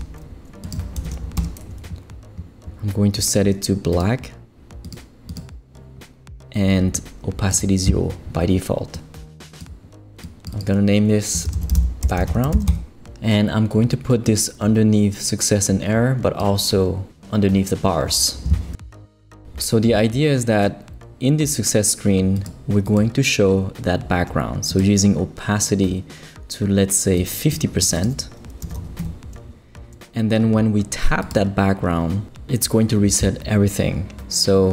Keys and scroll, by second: 1.0 shift+5, 1.4 shift+Return, 2.2 Return, 11.2-13.0 typing, 28.4-29.2 typing.